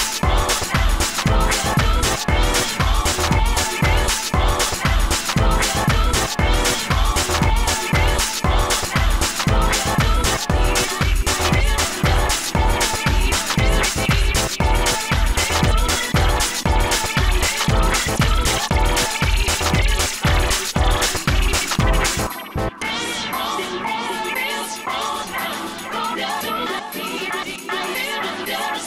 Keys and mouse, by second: 0.9 ctrl+s, 0.9 drag, 2.2 a, 2.4 right drag, 2.6 g, 3.3 g, 6.3 g, 6.8 g, 7.4 ctrl+j, 8.7 a, 8.8 a, 9.3 ctrl+n, 9.6 Tab, 10.4 Tab, 10.6 a, 10.7 a, 11.1 u, 11.7 u, 13.9 n, 14.2 n, 14.2 t, 14.7 click, 16.8 KP_1, 17.5 a, 17.9 l, 18.5 e, 19.8 u, 20.5 a, 20.8 a, 21.0 ctrl+p, 24.2 a, 24.6 l, 26.3 u, 27.1 ctrl+z.